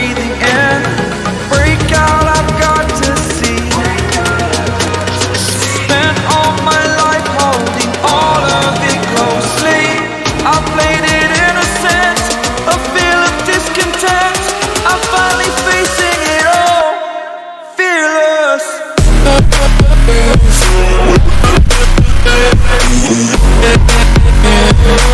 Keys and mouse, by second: 1.6 click, 4.6 click, 7.6 ctrl+d, 9.4 click, 12.8 click, 16.8 click, 20.9 click, 21.3 right click, 21.7 click, 22.5 click, 23.4 click, 24.0 click.